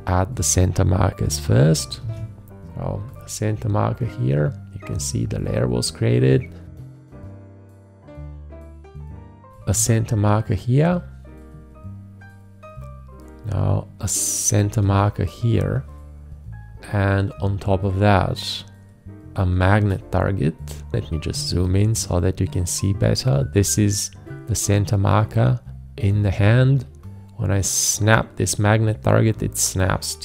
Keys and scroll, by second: 2.0 alt+`, 9.7 alt+`, 14.8 alt+`, 19.7 shift+`, 20.9 ctrl+space.